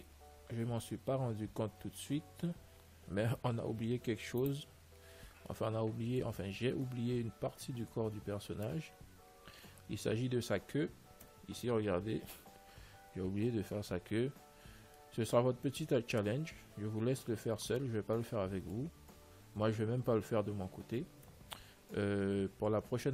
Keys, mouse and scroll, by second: 2.0 a, 2.7 Tab, 4.6 ctrl+s, 5.6-7.7 middle drag, 8.0-11.5 middle drag, 14.9-17.4 middle drag.